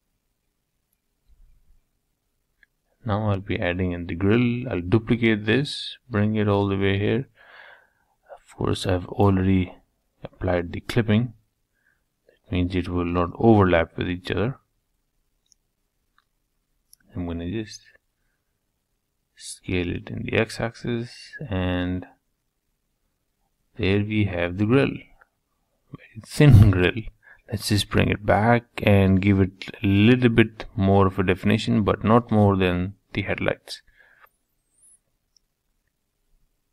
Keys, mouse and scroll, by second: 0.3 middle click, 1.0 scroll down 1, 1.3 middle click, 1.8 click, 2.5 3, 2.7 click, 3.4 shift+d, 6.1-8.1 middle drag, 10.5 g, 14.1-16.2 middle drag, 16.2 s, 19.5-21.3 middle drag, 25.0 g, 29.1-30.5 middle drag, 30.5 e, 31.9-34.1 middle drag, 34.1-34.5 scroll down 2, 34.5-35.9 middle drag, 35.9 Tab, 36.3 scroll down 1, 36.5-36.7 middle drag.